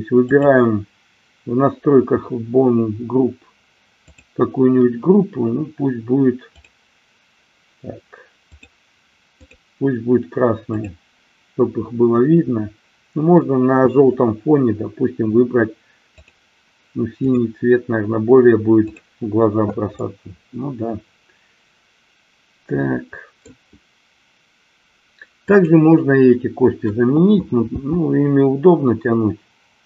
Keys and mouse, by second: 0.4 click, 4.2 click, 6.7 click, 8.5-9.7 drag, 10.7 click, 16.2-17.5 drag, 18.8 click, 20.2-23.4 middle drag, 25.3 click, 27.7 g.